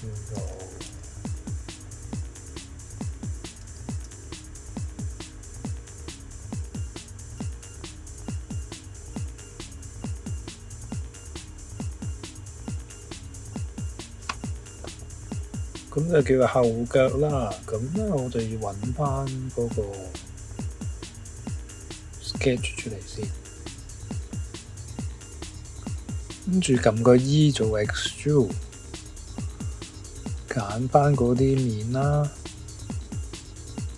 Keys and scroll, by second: 0.3 b, 24.8 Escape, 24.8 e, 27.2 e.